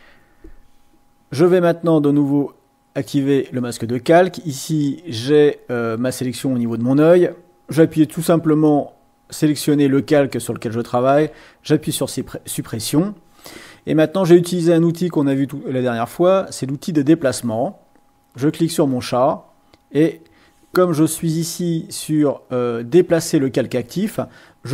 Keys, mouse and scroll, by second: 2.4 click, 8.8 click, 11.2 Delete, 16.4 click, 18.3 click.